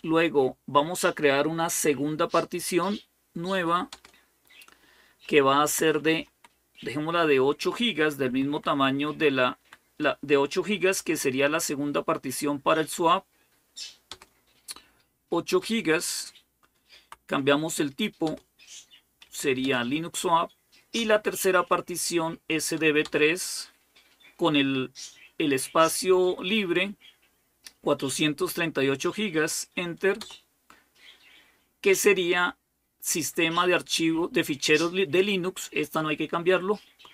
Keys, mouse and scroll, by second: 3.7 Return, 5.4 Left, 5.6 Left, 5.8 Left, 5.9 Left, 6.2 Left, 6.4 Left, 8.1 Delete, 8.3 Delete, 8.5 Delete, 8.7 Delete, 9.4 Delete, 10.7 8, 13.9 Return, 16.7 Right, 18.1 Return, 19.1 Up, 19.4 Return, 20.8 Down, 22.8 Return, 30.0 Return.